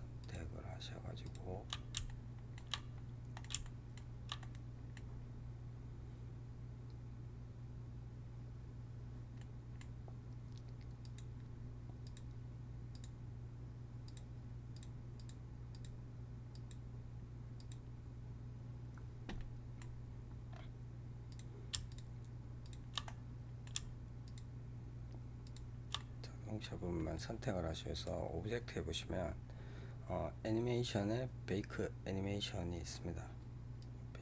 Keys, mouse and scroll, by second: 0.1-2.0 shift+drag, 2.0-7.4 shift+middle drag, 9.3-10.9 middle drag, 10.9-19.3 drag, 19.3-20.4 middle drag, 20.4 scroll up 1, 22.9-24.1 middle drag, 24.1 shift+click, 25.9-27.8 middle drag, 27.8-34.2 drag.